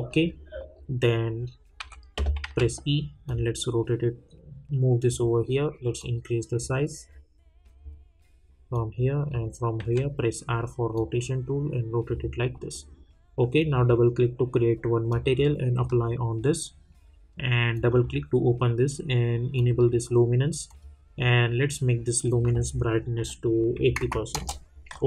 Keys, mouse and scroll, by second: 0.1 middle click, 1.8-2.4 typing, 3.2-7.0 drag, 7.0-8.7 scroll down 1, 8.7 click, 9.8 r, 10.9-12.5 drag, 12.5 middle click, 13.6-17.7 drag, 24.3 Return.